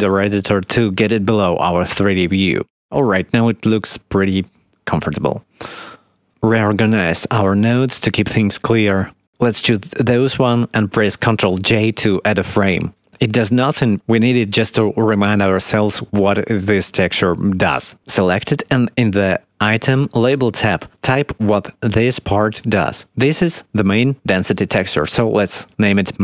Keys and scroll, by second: 4.2 0, 12.6 ctrl+j, 26.1-26.2 typing.